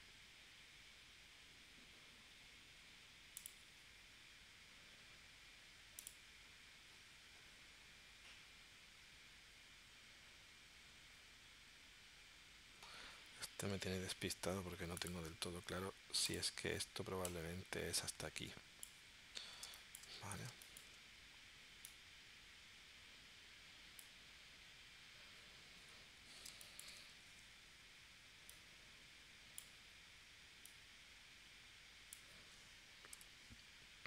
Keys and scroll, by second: 15.7 a, 19.7 space, 20.5 space, 26.5 space, 27.3 shift+c, 33.2 p.